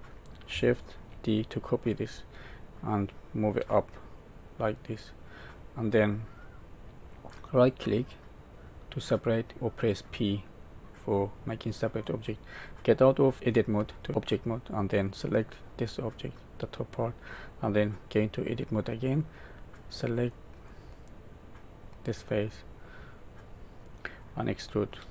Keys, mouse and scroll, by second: 1.0 shift+d, 7.7 right click, 13.7 Tab, 14.6 click, 15.8 middle click, 18.4 Tab, 20.2 middle click, 21.5 click, 24.9 e.